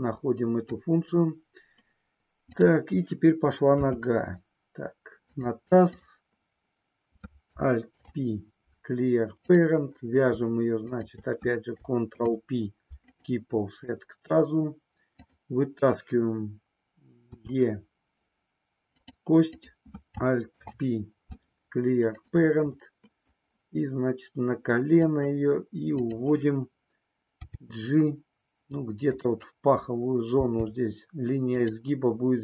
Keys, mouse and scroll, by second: 3.8 e, 8.0 alt+p, 10.8 shift+click, 12.1 ctrl+p, 17.3 e, 19.5 click, 20.5 alt+p, 23.3-25.1 drag, 26.0 click, 27.3 g, 30.3 g, 31.6 click.